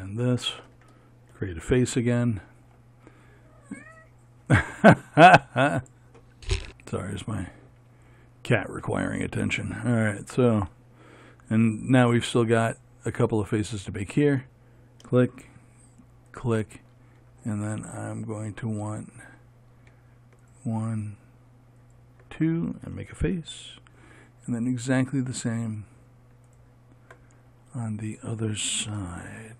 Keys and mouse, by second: 1.9 f, 13.9-24.0 drag, 24.0 f.